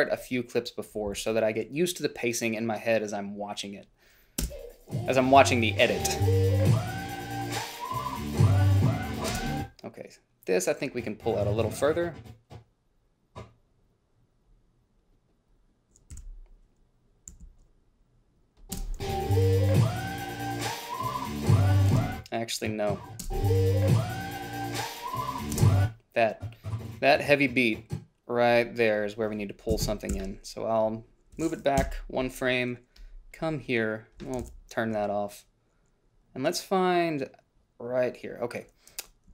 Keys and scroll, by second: 1.4 -, 4.7 space, 9.6 space, 16.4 h, 17.6 a, 19.0 space, 22.2 space, 23.5 space, 25.8 space, 30.0 Left, 30.4 g, 32.1 Delete, 34.8 ctrl+b.